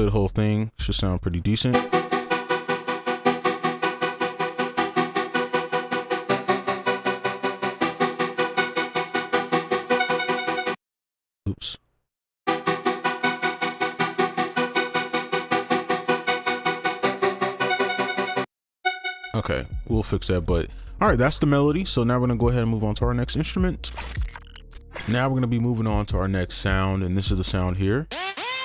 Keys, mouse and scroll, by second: 0.9 double click, 1.7 space, 10.7 space, 11.2 ctrl+click, 12.4 space, 13.3 right click, 14.7 ctrl+a, 14.9 ctrl+q, 15.5 right click, 18.4 space, 19.2 right click, 20.5 double click, 28.3 double click.